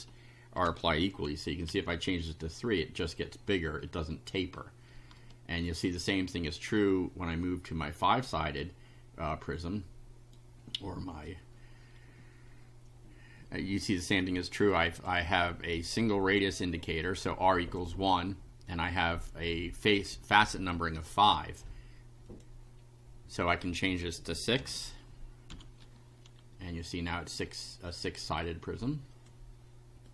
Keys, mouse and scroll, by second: 0.6 3, 1.7 F5, 5.2 shift+right click, 9.2-10.5 right drag, 14.7 click, 15.8 click, 17.1 click, 18.7-20.1 drag, 22.3 click, 23.6 click, 24.6 6, 25.5 F5, 27.5 right click, 28.4-29.5 drag, 30.0 click.